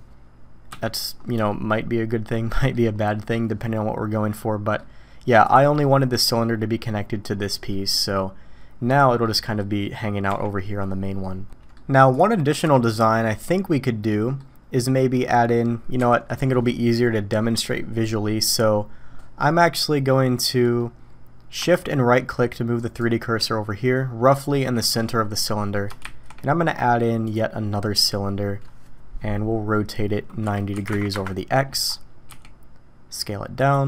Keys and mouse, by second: 1.5-1.8 drag, 1.8-2.7 middle drag, 3.3-4.8 middle drag, 5.4 click, 5.8-6.2 middle drag, 7.7 middle drag, 8.9-9.2 drag, 9.2-9.6 middle drag, 10.3 g, 11.5 drag, 12.5-14.4 drag, 15.0 click, 16.0 KP_1, 22.8 shift+click, 26.0 shift+a, 30.5 r, 32.3 s.